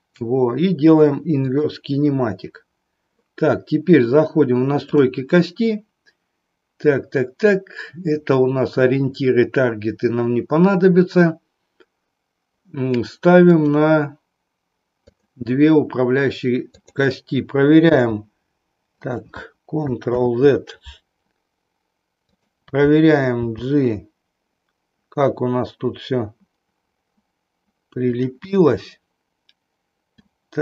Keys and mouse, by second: 4.8 click, 13.5 click, 15.0 click, 16.7 click, 17.8 g, 19.1 click, 20.1 ctrl+z, 22.2 click, 23.3 g, 28.2 click, 28.6-30.2 middle drag.